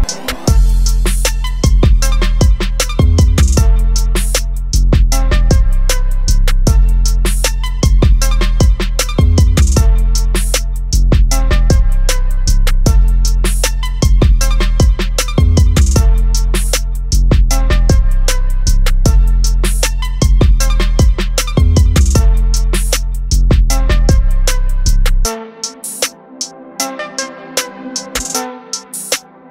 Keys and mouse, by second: 3.8 click, 11.0 typing, 16.6 click, 16.6 typing.